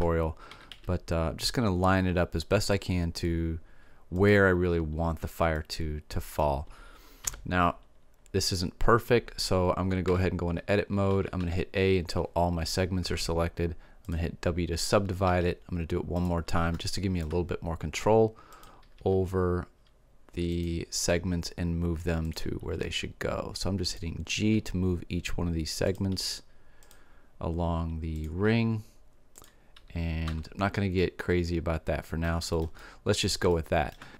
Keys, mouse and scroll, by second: 0.2-1.4 middle drag, 0.5 s, 4.2-5.5 drag, 5.5 middle click, 7.2 KP_7, 7.5 middle click, 10.0 Tab, 11.1 a, 11.4 a, 13.0 w, 15.2 w, 16.7 middle click, 18.6 right click, 18.9 g, 22.8 g, 26.1 g, 28.5 g, 30.2 Tab, 33.9-34.1 middle drag.